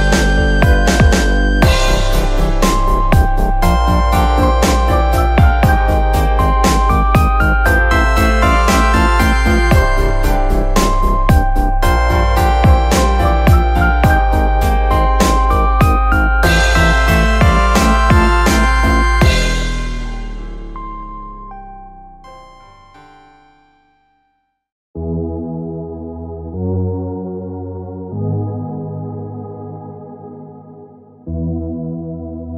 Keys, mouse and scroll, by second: 0.4 click, 1.3-2.4 middle drag, 2.4 click, 3.0-4.2 middle drag, 4.2 click, 5.9 click, 6.4 click, 8.1 click, 8.6 click, 9.9 middle click, 10.7 click, 12.0 click, 12.7 click, 14.0-15.8 middle drag, 15.8 click, 16.7 click, 18.0 shift+click, 19.9 shift+click, 21.0 e, 21.9 click, 23.0 click, 23.7 click, 24.2 click, 27.2-27.6 scroll down 2, 27.6-31.3 middle drag.